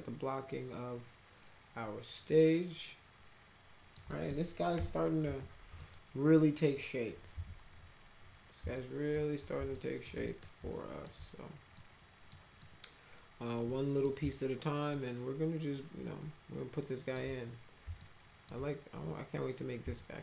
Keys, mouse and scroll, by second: 4.0 middle click, 4.7 p, 5.2 z, 5.7 middle click, 7.3 z, 8.7 alt+middle click, 9.7 alt+middle click, 10.2 middle click, 10.7 alt+middle drag, 11.7 middle click, 12.6-14.0 middle drag, 14.9-17.1 alt+middle drag, 17.9 alt+middle click, 19.9 alt+middle click.